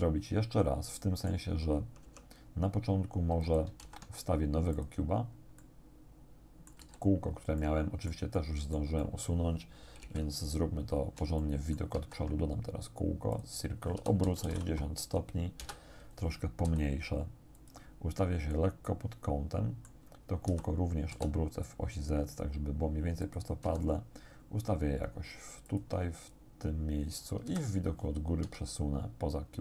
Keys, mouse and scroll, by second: 2.1 Tab, 3.3 x, 3.5 shift+click, 3.9 shift+a, 4.8 click, 5.7 middle click, 6.6 click, 6.9 z, 7.3 scroll down 1, 7.6 click, 10.1 1, 11.5 shift+click, 12.0 shift+a, 13.4 click, 14.0 r, 14.3 x, 14.5 9, 15.7 Return, 16.7 s, 17.6 click, 18.9-20.1 drag, 20.5 r, 21.1 z, 23.3 click, 23.7 g, 25.7 click, 27.5 KP_7, 28.5 g.